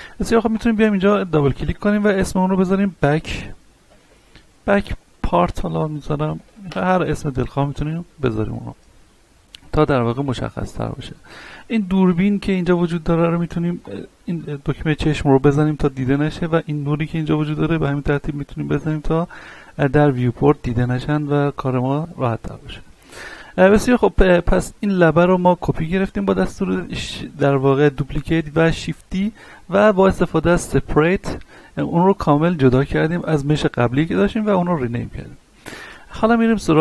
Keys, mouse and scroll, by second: 0.1 ctrl+z, 0.5 click, 2.8-6.3 typing, 6.7 Return, 7.8-8.2 scroll up 1, 8.2-10.7 middle drag, 12.4 click, 15.7 scroll down 1, 16.0-17.7 middle drag, 17.7 click, 18.2 middle click, 20.2 right click, 21.3-27.8 middle drag, 33.2 right click, 35.6 right click.